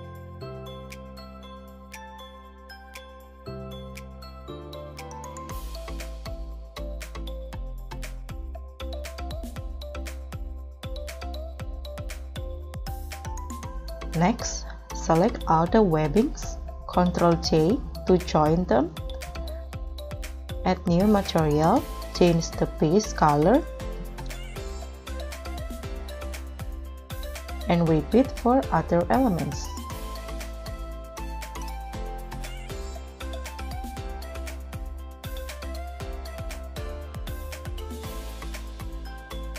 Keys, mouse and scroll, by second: 0.0-1.6 typing, 1.3 KP_Enter, 2.6-3.1 scroll down 10, 2.8-7.2 typing, 7.5-7.9 scroll up 3, 8.0 scroll down 1, 8.3 ctrl+s, 9.4 r, 9.5 z, 10.9-12.5 typing, 13.2 scroll up 12, 13.8-15.7 scroll down 8, 15.7 shift+click, 18.2 ctrl+j, 19.4-20.6 scroll down 5, 22.2-24.0 scroll down 8.